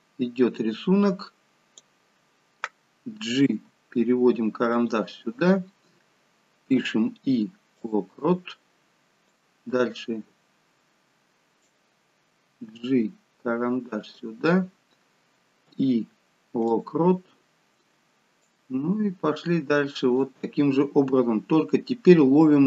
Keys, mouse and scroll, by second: 3.4 g, 6.7 i, 9.3 click, 12.4 g, 15.6 i, 18.5 click, 21.1 scroll up 5.